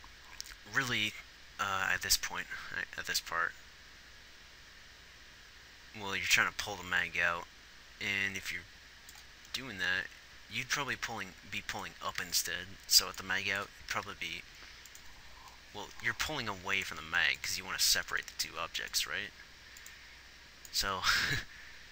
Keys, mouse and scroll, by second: 0.8-2.7 drag, 11.2 g, 12.5 g, 18.4 g.